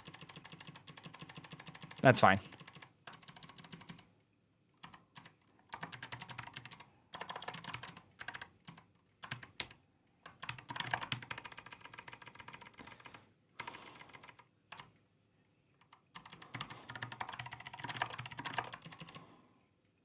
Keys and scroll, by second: 0.1 ctrl+u, 0.2 ctrl+u, 0.3 ctrl+u, 0.5 ctrl+u, 0.7 ctrl+u, 1.1 ctrl+u, 1.2 ctrl+u, 1.4 ctrl+u, 1.7 ctrl+u, 1.8 ctrl+u, 2.0 ctrl+u, 2.1 ctrl+u, 2.3 ctrl+u, 2.6 ctrl+u, 3.0-9.0 typing, 9.1 ctrl+v, 9.4 ctrl+g, 10.3 ctrl+c, 10.3-11.1 typing, 11.3 ctrl+d, 11.5 ctrl+d, 11.7 ctrl+d, 11.8 ctrl+d, 11.9 ctrl+d, 12.1 ctrl+d, 12.2 ctrl+d, 12.3 ctrl+d, 12.5 ctrl+d, 12.6 ctrl+d, 12.7 ctrl+d, 12.9 ctrl+d, 13.4 ctrl+d, 13.5 ctrl+d, 13.7 ctrl+d, 13.8 ctrl+d, 14.1 ctrl+d, 14.6-18.4 typing, 17.4 ctrl+c, 18.7 ctrl+u, 18.9 ctrl+u, 19.6-20.0 ctrl+u.